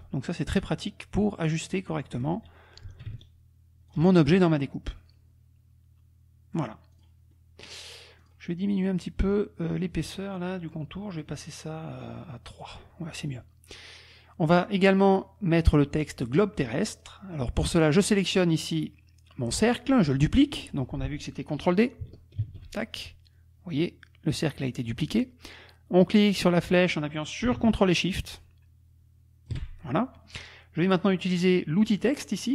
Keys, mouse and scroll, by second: 3.3 ctrl+shift+click, 4.4-6.8 ctrl+shift+drag, 6.9 click, 8.3 click, 11.1 right click, 12.5 click, 13.8 click, 16.9 click, 17.6 click, 22.4 ctrl+d, 26.4-29.7 drag.